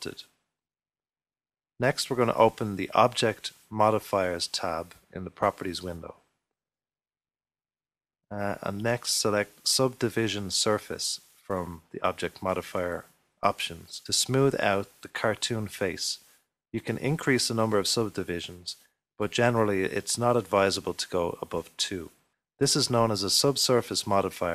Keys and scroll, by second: 1.6-2.4 typing, 4.6-5.4 typing, 22.6 typing, 23.3 ctrl+r.